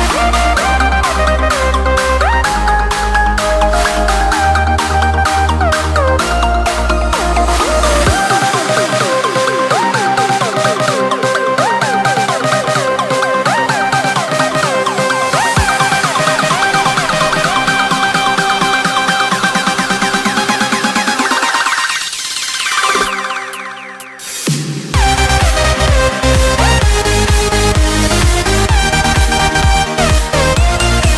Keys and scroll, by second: 3.8 space, 22.8 ctrl+v, 23.0 ctrl+space, 23.7 ctrl+shift+[, 24.1 ctrl+space, 28.2 ctrl+space.